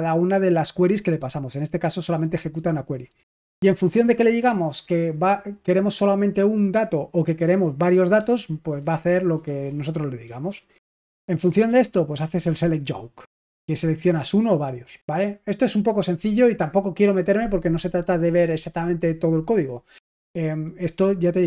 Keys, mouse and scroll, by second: 3.0-3.6 typing, 8.7-13.5 typing.